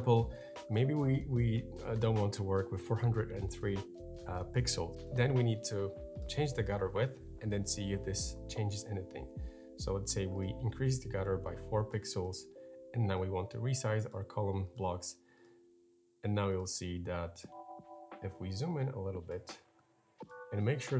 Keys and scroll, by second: 6.6 Up, 8.3 Up.